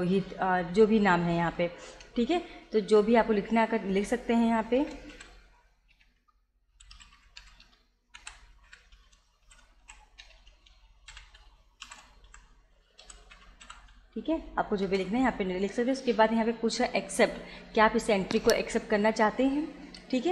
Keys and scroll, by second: 4.8-9.9 typing, 11.2-14.2 typing, 14.9 Return.